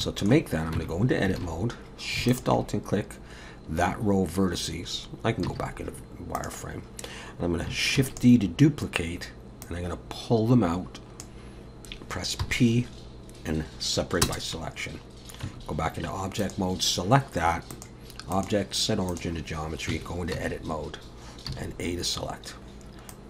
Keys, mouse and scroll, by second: 0.0 shift+middle click, 0.8 Tab, 1.4 alt+a, 2.3 alt+shift+click, 5.5 z, 8.0 shift+d, 9.7 click, 12.4 p, 15.5 Tab, 16.4 click, 17.7 click, 19.9 Tab, 20.3 s, 21.5 a, 23.1 click.